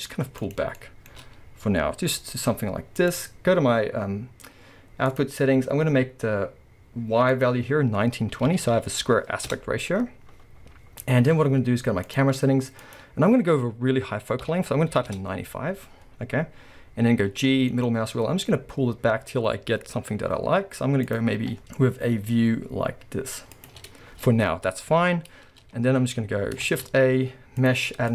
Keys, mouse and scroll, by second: 0.6 click, 0.6-3.1 shift+middle drag, 1.4-1.8 scroll, 2.1 g, 3.1 click, 5.1 click, 7.3-12.1 drag, 9.5 Return, 11.1 scroll, 12.8-21.2 drag, 15.1 Return, 17.3 g, 21.4 g, 23.8 scroll up 1, 26.7 shift+a.